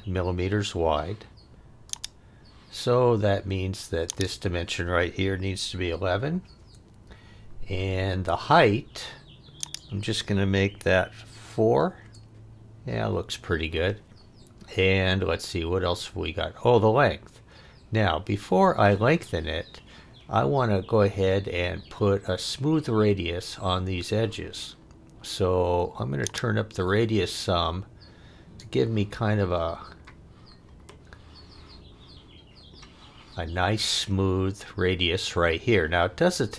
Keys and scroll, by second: 5.6 1, 6.6 Return, 7.9 Return, 11.3 4, 12.0 Return, 13.2 Return.